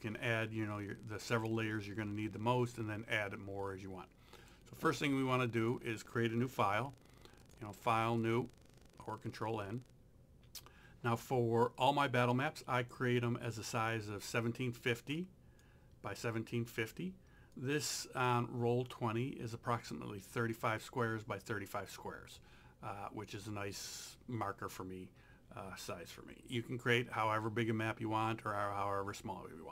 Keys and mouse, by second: 4.4 click, 7.5 click, 12.8 click, 15.2 click.